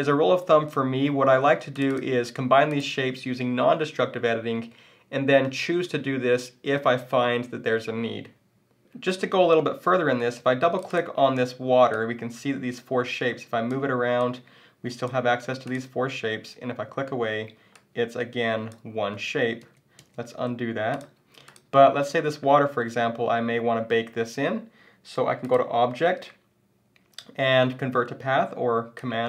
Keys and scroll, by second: 18.9 super+z.